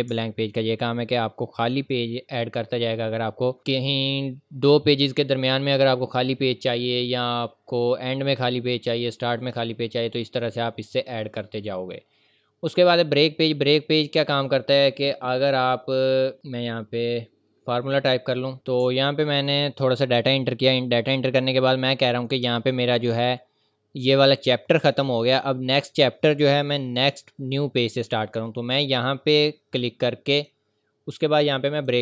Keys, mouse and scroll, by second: 0.1 v, 0.1 ctrl+click, 0.5-1.0 ctrl+scroll up 2, 0.6 ctrl+v, 1.0 ctrl+v, 1.6 click, 9.2-9.8 scroll up 1, 9.8 scroll down 1, 13.3 scroll up 1, 14.0-16.1 scroll down 1, 18.5 scroll up 1, 18.7-19.3 scroll down 2, 19.3 ctrl+v, 19.6 scroll up 1, 21.5 click, 22.4 Return, 23.8 scroll up 1, 30.3 click.